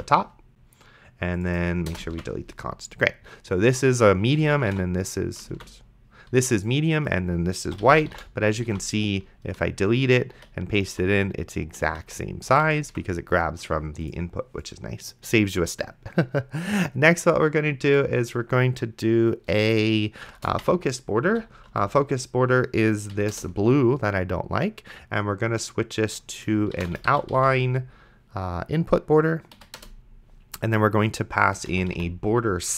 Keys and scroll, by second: 0.2 ctrl+s, 1.9 BackSpace, 2.4 ctrl+s, 4.2-5.5 typing, 5.8 ctrl+z, 7.6-8.9 typing, 8.9 ctrl+a, 9.7 ctrl+x, 10.7 ctrl+v, 11.9 z, 20.5 f, 21.3 o, 21.7 c, 23.1 Down, 23.3 Return, 26.8-28.3 typing, 29.6 Down, 29.8 Return, 31.7 b, 32.0 o.